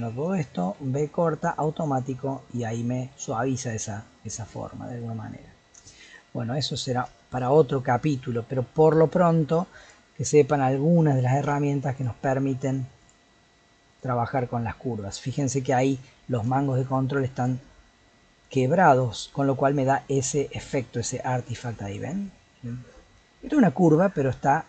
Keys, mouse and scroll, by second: 0.7 v, 3.1-5.5 middle drag, 5.5-5.9 scroll down 1, 5.9-8.9 shift+middle drag, 8.9 scroll up 2, 9.2 middle click, 9.8 click, 10.2-11.4 middle drag, 11.4 v, 12.5 middle click, 13.0 click, 13.9 click, 15.1-16.3 middle drag, 16.3 scroll up 1, 16.5 shift+middle click, 17.3 click, 21.3 g.